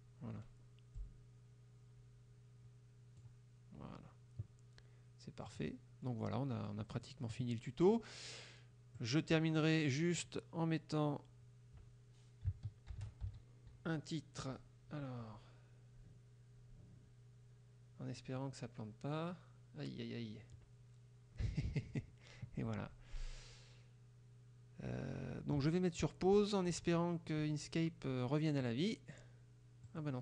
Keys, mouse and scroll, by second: 1.1-3.5 drag, 5.6 click, 6.1 middle click, 9.0 click, 10.2 click, 13.0 shift+r, 13.3 shift+e, 28.7 click, 29.8 click.